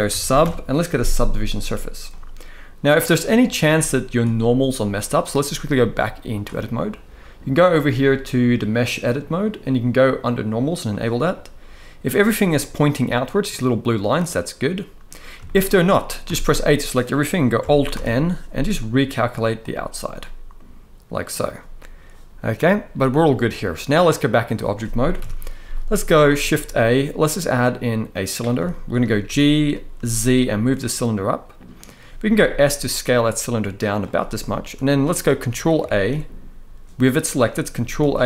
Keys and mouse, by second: 1.8-2.8 middle drag, 3.5 shift+middle drag, 3.9-4.2 middle drag, 4.7 middle click, 5.5-6.1 drag, 9.1-10.8 drag, 11.0-12.0 middle drag, 13.2-14.7 middle drag, 15.1 shift+middle drag, 15.9 a, 17.6 alt+n, 19.9-21.0 middle drag, 22.3-22.8 drag, 23.4-24.0 middle drag, 24.9 KP_1, 26.1 shift+a, 28.4 shift+middle drag, 29.0 g, 29.7 z, 31.5 click, 32.7 s, 34.2 shift+middle click, 35.5 ctrl+a, 37.7 ctrl+a.